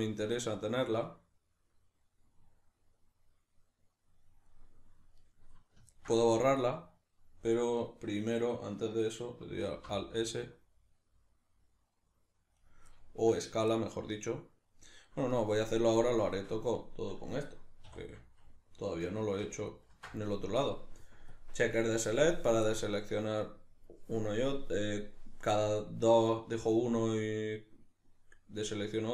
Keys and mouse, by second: 9.7 alt+s, 12.7 right click, 12.9-19.7 middle drag, 17.9 2, 19.7 ctrl+alt+right click, 20.3-21.4 middle drag, 21.4-22.7 drag, 22.7-24.6 middle drag, 24.6-29.1 drag.